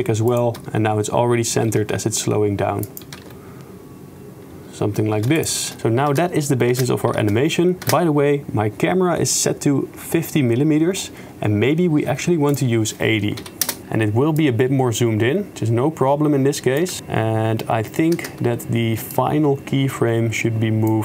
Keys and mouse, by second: 0.3 click, 0.6 shift+space, 1.8 shift+space, 2.9 click, 3.2 shift+space, 5.3-7.9 typing, 5.4 click, 12.5-13.7 drag, 14.4-16.8 drag, 17.0 shift+space, 18.3 shift+space, 19.1-21.0 drag.